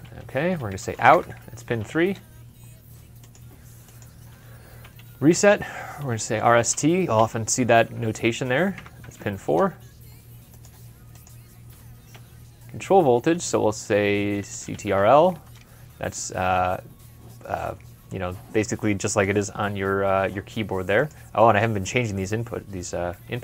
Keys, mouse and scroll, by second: 0.2-1.4 typing, 1.9 Return, 5.6-8.9 typing, 8.6 Tab, 9.3 Return, 13.6-14.9 typing.